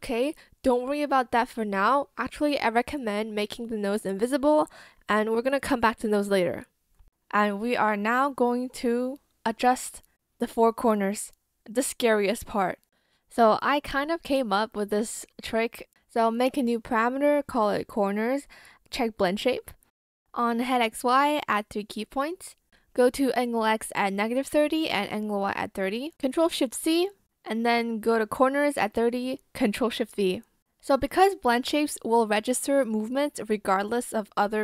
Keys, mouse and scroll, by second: 6.2 ctrl+shift+z, 15.5-16.9 typing, 23.8 ctrl+shift+c, 27.6 ctrl+shift+v.